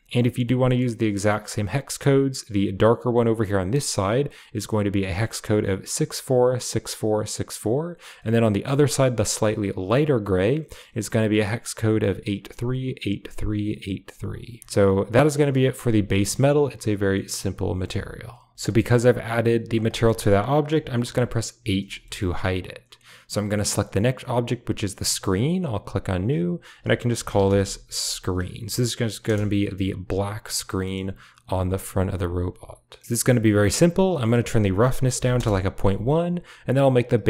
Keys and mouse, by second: 0.0 ctrl+v, 0.3 middle click, 2.1 click, 2.9 click, 3.8 click, 8.7 click, 15.4 click, 15.7 g, 17.7 middle click, 18.1-18.4 drag, 18.6 middle click, 19.4 click, 19.8 shift+middle click, 21.5 h, 21.9 shift+middle click, 23.5 click, 25.2 click, 26.4-29.2 drag, 28.0 e, 30.7 middle click, 31.3 s, 34.0-35.2 drag, 36.5 click.